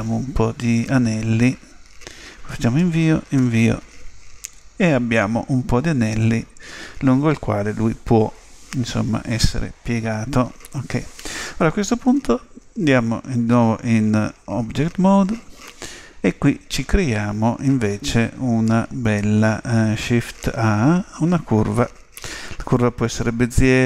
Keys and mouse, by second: 12.0 Tab, 20.5 shift+a.